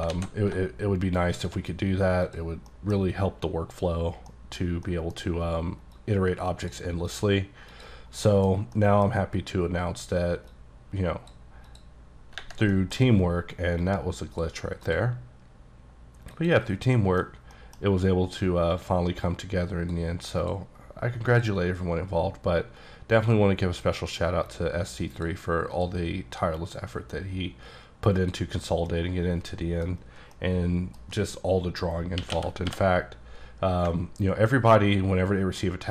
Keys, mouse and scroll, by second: 0.2 alt+x, 1.4 shift+click, 2.6 scroll down 1, 2.8 middle click, 3.1-4.0 scroll up 3, 4.0-4.3 scroll up 1, 4.3 middle click, 4.6 scroll down 1, 4.9 middle click, 5.3-6.0 scroll up 1, 6.0 click, 7.2 click, 7.8 click, 8.1 scroll down 3, 8.3 middle click, 8.8 middle click, 8.9 scroll down 1, 10.6 click, 11.7 click, 12.8 middle click, 13.0-13.9 scroll up 3, 13.9 click, 14.9 click, 16.4 click, 16.8 scroll down 2, 17.0 middle click, 17.6 middle click, 17.9-18.8 scroll up 1, 19.2 click, 20.5 click, 24.5 click, 25.8 click, 27.2 scroll down 2, 28.2 click, 28.6-28.9 scroll down 3, 28.9 middle click, 30.0 scroll down 1, 30.4 middle click, 32.2-32.8 typing, 34.1-35.2 ctrl+scroll down 4, 35.2-35.9 ctrl+scroll up 1.